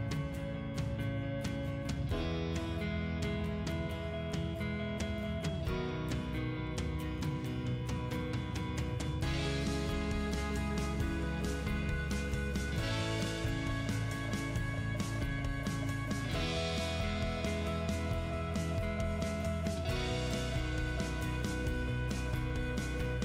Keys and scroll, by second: 1.0 Delete, 2.8 d, 3.1 space, 12.7 5, 12.8 Return, 15.0 2, 15.2 Return, 20.5-21.6 typing, 22.9 2, 23.1 Return.